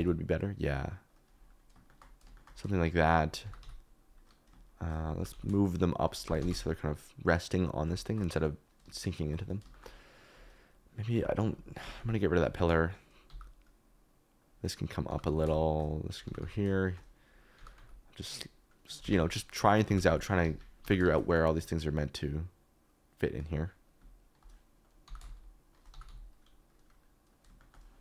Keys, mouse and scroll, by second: 1.1 click, 1.9 shift+click, 3.4 g, 3.6 x, 5.1 g, 5.3 x, 6.2 g, 6.3 z, 9.8 shift+click, 11.1-11.9 typing, 11.5 click, 12.4 click, 13.2 g, 15.1 g, 15.2 x, 16.2 g, 16.4 x, 16.6 click, 16.8 shift+click, 17.5 g, 17.7 x, 19.0 Escape, 19.8 g, 20.0 x, 20.4 Escape, 20.8 g, 21.0 shift+z, 25.0 g, 25.2 shift+z, 25.9 g, 26.0 x, 27.5 shift+click.